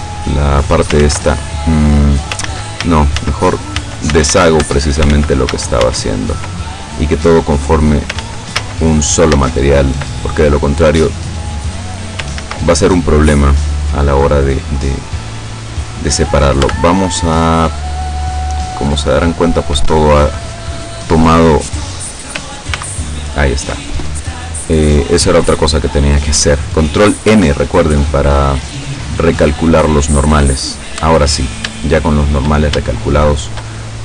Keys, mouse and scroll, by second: 1.0 ctrl+z, 1.7 scroll down 2, 2.5 ctrl+z, 4.6 ctrl+Tab, 5.2 ctrl+z, 7.4 click, 8.2 ctrl+z, 9.4 ctrl+z, 10.3 ctrl+scroll down 2, 11.1-12.2 drag, 12.4 ctrl+z, 12.8-16.0 ctrl+middle drag, 16.2 right click, 16.6 Tab, 17.1-20.2 middle drag, 22.8 ctrl+n, 25.0-25.4 scroll up 2, 25.4 scroll down 2, 26.0 click, 27.4 Tab, 28.6-30.9 drag, 31.4-31.8 scroll up 3, 31.9 shift+middle click, 33.0 shift+middle click, 33.8 shift+scroll up 2.